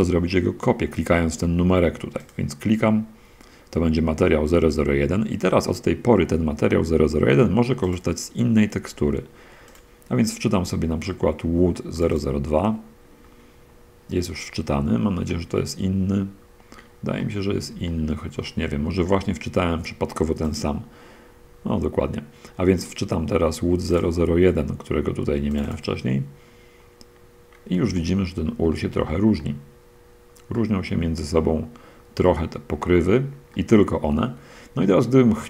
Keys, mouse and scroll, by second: 2.5 click, 7.8-8.4 drag, 10.0 click, 12.2 click, 15.2-16.4 drag, 16.4 middle click, 16.7-17.2 scroll up 1, 17.5 middle click, 18.2-19.3 shift+middle drag, 19.5 middle click, 20.8 click, 22.8-23.4 drag, 25.7 click, 28.2-30.4 shift+drag, 30.6-32.5 drag, 33.2-35.0 drag, 35.0 middle click.